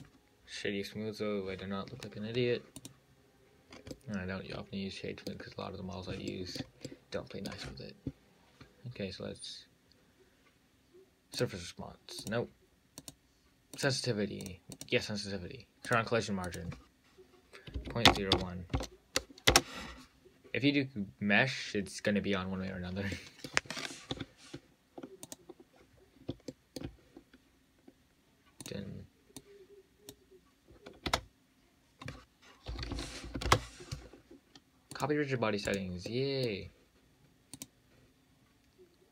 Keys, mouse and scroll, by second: 2.6-3.0 scroll up 2, 3.0 click, 3.6-4.0 scroll down 3, 4.0 scroll up 3, 4.2-6.1 middle drag, 6.1-6.6 scroll up 2, 6.6-10.2 shift+middle drag, 11.6 click, 12.4 click, 13.3 click, 14.0-15.2 drag, 16.1 click, 16.7-19.8 drag, 23.0-23.4 scroll down 4, 23.4 middle click, 24.4 `, 26.3-26.8 scroll up 1, 26.8 shift+middle click, 27.2-28.9 scroll down 3, 28.9 click, 29.6 drag, 31.3 space, 36.0 click, 36.3-37.8 middle drag, 37.8 drag, 38.4-39.1 scroll down 2.